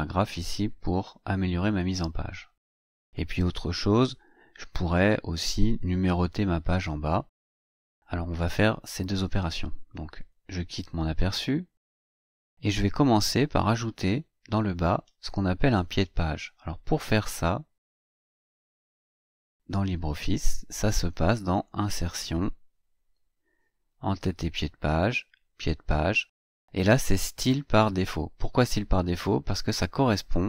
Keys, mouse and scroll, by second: 11.1 click, 12.2-12.8 scroll down 4, 12.8 scroll up 2, 13.0-18.0 scroll down 6, 18.0 click, 21.4 click.